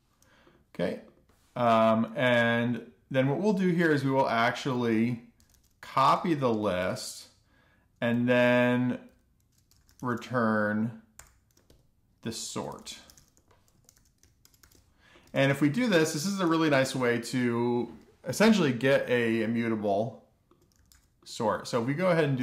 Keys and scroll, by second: 1.1-1.9 typing, 5.8-8.2 typing, 9.5-12.8 typing, 13.3 Escape, 14.0-15.5 typing, 15.3 Tab, 16.0 alt+shift+f, 16.2 alt+shift+f, 16.9 alt+shift+f, 17.4 super+s, 22.1-22.4 typing.